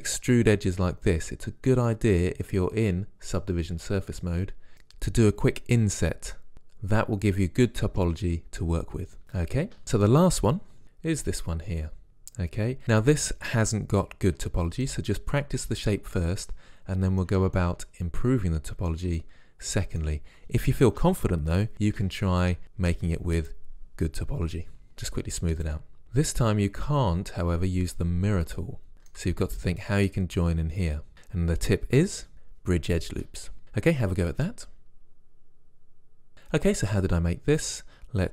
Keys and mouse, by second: 9.2 Tab, 10.8 KP_Decimal, 16.5-17.7 drag, 25.7 click, 37.6-38.3 drag.